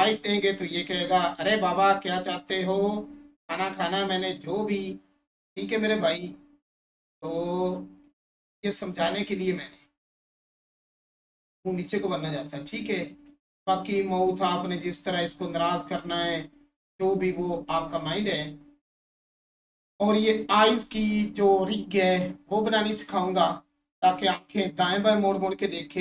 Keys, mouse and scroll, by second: 20.0 click.